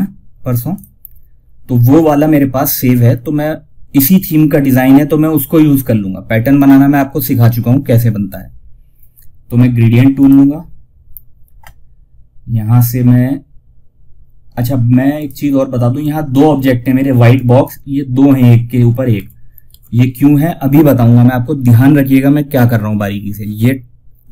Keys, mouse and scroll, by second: 0.0 click, 0.0 typing, 9.5 click, 14.4 click, 18.4 ctrl+z.